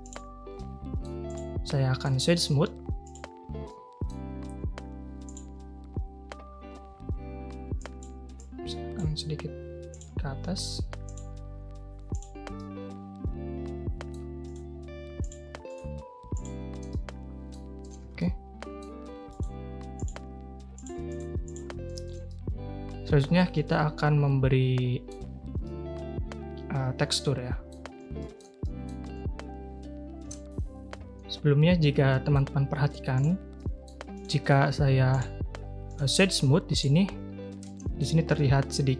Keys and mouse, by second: 0.0 click, 0.5-1.0 middle drag, 2.0-3.1 right drag, 3.6-4.0 middle drag, 5.2 click, 7.8 click, 8.5 click, 11.1 click, 12.1 click, 12.5-14.1 middle drag, 14.4-15.2 right drag, 15.7-16.5 right drag, 16.9-17.5 middle drag, 17.8 a, 18.0 a, 18.1-18.7 middle drag, 19.3-20.0 right drag, 20.7 click, 21.0 click, 21.8 a, 22.0 a, 22.2-25.0 middle drag, 25.6-27.7 middle drag, 28.1 shift+middle drag, 28.6 middle drag, 30.4 ctrl+shift+[, 30.4 a, 31.9-32.3 middle drag, 33.1 click, 33.6 middle click, 34.2-35.1 drag, 36.0-36.8 drag, 37.6 middle click.